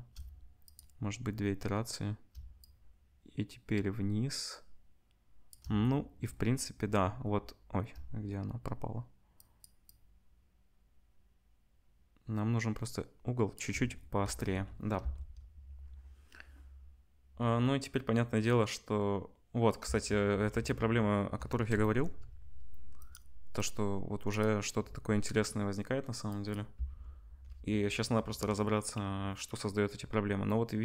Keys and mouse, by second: 9.6 shift+middle click, 9.8-20.2 shift+drag, 15.8 space, 20.2 space, 20.2 KP_0, 21.6-23.7 shift+drag, 23.7-25.0 middle drag, 25.0-30.8 drag, 26.9 space.